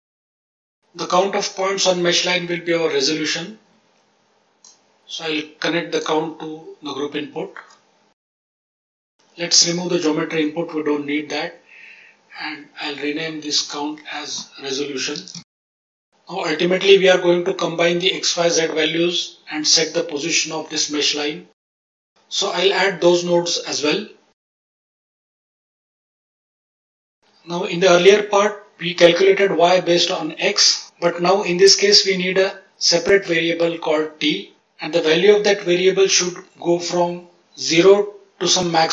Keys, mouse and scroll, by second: 0.1 click, 0.6 middle click, 4.2-4.9 drag, 6.5 n, 9.1 click, 10.2 click, 10.8 click, 13.5-15.9 drag, 18.9-19.3 middle drag, 20.0 click, 21.0-21.4 middle drag, 21.7 shift+a, 23.8 click, 24.1 shift+a, 25.4 click, 25.7 click, 25.9 click, 26.1 click, 26.6 drag, 27.0 middle click.